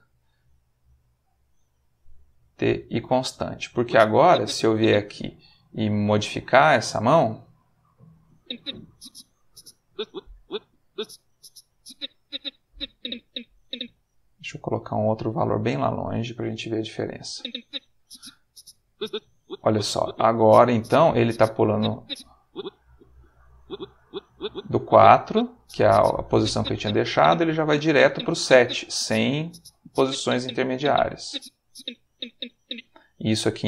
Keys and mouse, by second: 0.3 middle click, 1.2 click, 2.3 t, 2.7 click, 3.6-4.9 drag, 5.6-7.2 drag, 8.3-13.9 drag, 14.7-16.2 drag, 17.3-32.7 drag, 33.4 click.